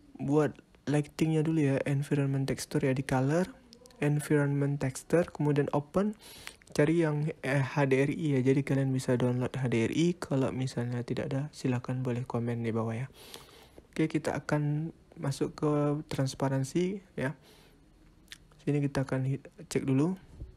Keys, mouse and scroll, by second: 0.0 click, 2.2 click, 4.7 click, 11.5 click, 13.0-13.3 scroll down 12, 14.6 click, 18.0 click.